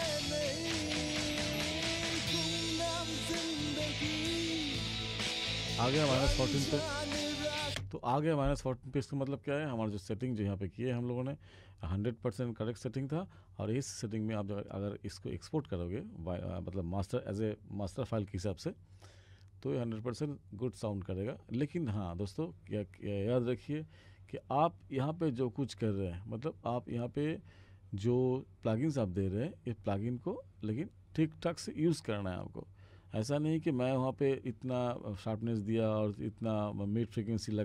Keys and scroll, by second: 7.7 space.